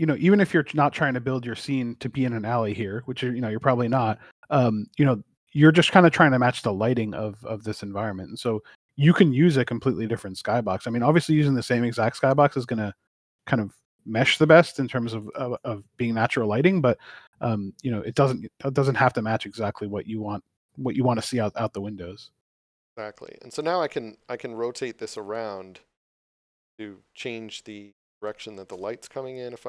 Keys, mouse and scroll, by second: 0.0 ctrl+z, 2.5 click, 6.5 middle click, 16.4 scroll up 1, 17.1 middle click, 19.0 click, 22.9 click.